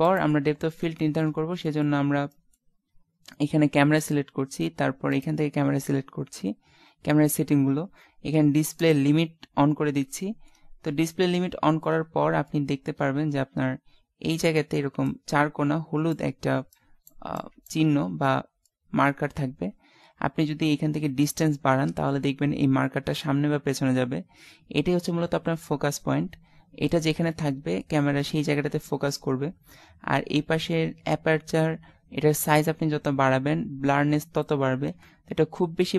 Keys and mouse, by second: 0.0 ctrl+s, 2.4 middle click, 4.0-5.4 right drag, 9.6-10.7 middle drag, 11.5 middle click, 11.9 middle click, 12.6 middle click, 18.6-21.2 middle drag, 22.7 click, 27.4 middle click, 28.2-30.5 middle drag, 32.5-35.9 drag.